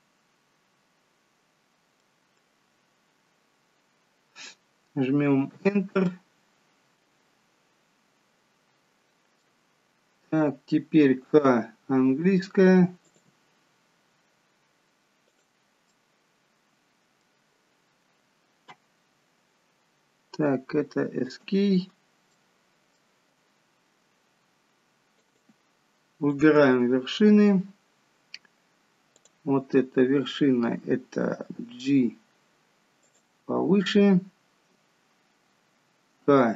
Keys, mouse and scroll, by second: 2.1 middle click, 6.1 middle click, 11.2 k, 16.0 middle click, 22.4 middle click, 25.2 click, 26.4 click, 31.6 g, 36.3 k.